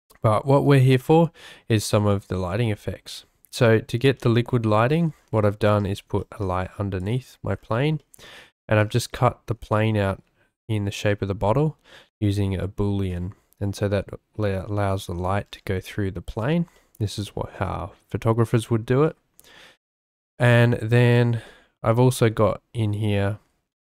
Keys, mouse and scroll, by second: 0.0 shift+middle drag, 0.2 shift+drag, 0.4-1.7 shift+middle drag, 1.7-3.7 drag, 3.7-4.1 middle drag, 4.1-4.6 drag, 4.6-5.3 middle drag, 5.3-5.8 drag, 5.8-6.2 shift+middle drag, 5.8 scroll, 6.2 shift+drag, 6.4 shift+scroll, 7.0 click, 8.0-8.6 shift+drag, 8.6 shift+scroll, 9.7-10.0 shift+drag, 15.8-16.4 drag, 16.7 shift+drag, 17.2-17.6 drag, 19.0 shift+click, 20.4 shift+click, 20.8 shift+middle click, 21.1 click, 21.5-22.0 drag.